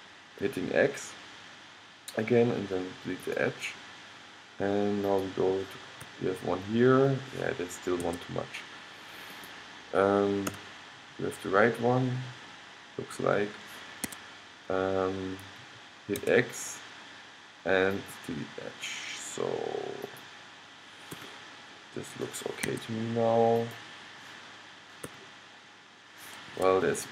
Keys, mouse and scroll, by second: 5.2 middle click, 5.4-7.1 right drag, 6.2 g, 9.4-10.6 right drag, 10.6 g, 16.3 x, 20.2-21.6 right drag, 21.3 g, 21.9-23.7 middle drag, 25.2 g.